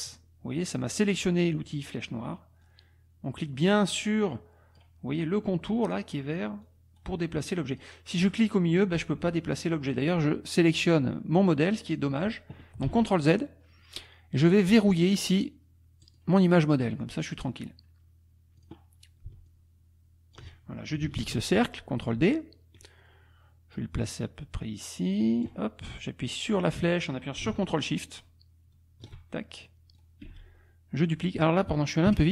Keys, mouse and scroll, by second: 2.7-4.9 drag, 6.6 click, 7.0-8.0 scroll down 2, 8.2-11.8 drag, 11.8-12.4 scroll down 3, 12.9 ctrl+z, 16.0 click, 16.7 click, 17.2 click, 18.7 click, 19.5-20.5 ctrl+drag, 21.2 ctrl+d, 22.1-23.7 ctrl+drag, 23.7-24.9 scroll down 2, 24.9-25.6 scroll down 1, 26.4-29.2 drag, 30.0-30.8 scroll down 2, 30.3 space, 30.8-31.4 scroll down 1, 31.4 ctrl+scroll down 1, 32.1 ctrl+Delete.